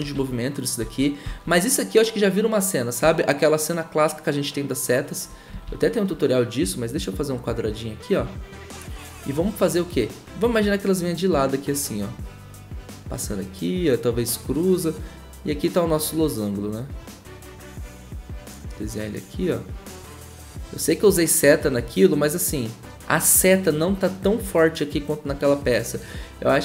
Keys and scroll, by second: 0.1 ctrl+z.